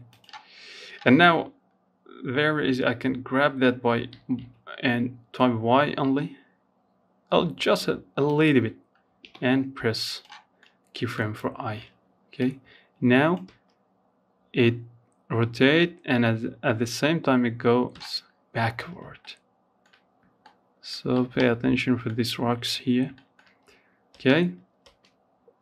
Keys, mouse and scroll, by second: 0.9 g, 7.4 i, 8.8-10.6 middle drag, 10.6-11.6 drag, 11.6 space, 16.1 space, 16.4-17.0 scroll up 3, 17.0-17.4 scroll down 2, 17.4 shift+middle click, 18.1-18.6 scroll up 1, 18.6-20.6 shift+middle drag, 20.6-21.3 scroll down 3, 21.3 shift+middle click, 22.3 space, 23.0 space, 23.7 scroll down 1, 24.0 middle click, 24.4-24.8 scroll up 1, 24.8-25.6 shift+middle drag.